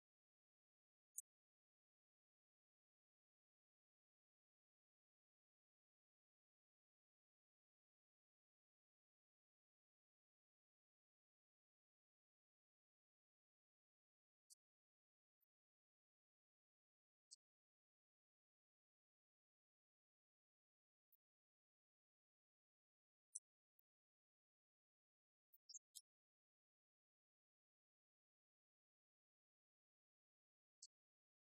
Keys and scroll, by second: 0.3 Right, 2.5 Right, 3.2 Left, 7.1 Right, 8.7 Right, 11.4 Left, 13.1 ctrl+Left, 13.7 Right, 17.1 Right, 19.4 Left, 23.3 Right, 26.3 Left, 27.3 Right, 28.5 Left, 29.1 Left, 29.9 Right, 30.5 Left, 30.8 shift+Right.